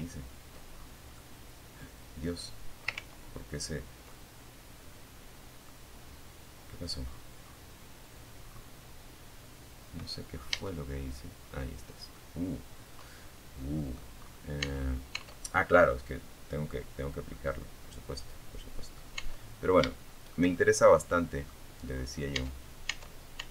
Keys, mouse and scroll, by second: 1.2 ctrl+z, 1.3 ctrl+middle click, 2.3-3.9 ctrl+middle drag, 5.3-5.9 scroll down 3, 6.6-7.1 scroll up 2, 8.7 Tab, 9.7 scroll up 2, 10.3-12.3 middle drag, 12.5 scroll up 1, 12.9 Tab, 15.5-17.3 middle drag, 17.5 Tab, 18.1 shift+middle click, 18.7-19.8 shift+middle drag, 20.5 Tab, 22.4 right click, 23.3 right click.